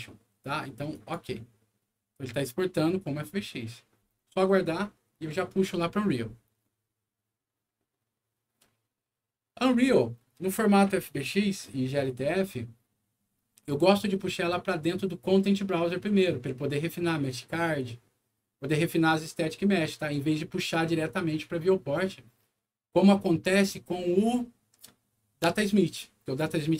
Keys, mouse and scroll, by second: 0.9 click.